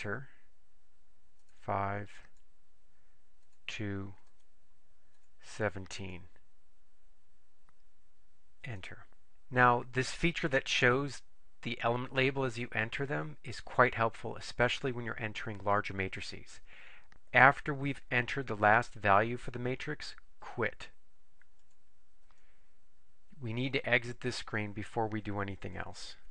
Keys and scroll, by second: 1.5 5, 2.3 Return, 3.5 2, 4.4 Return, 5.2 1, 6.2 7, 8.7 Return.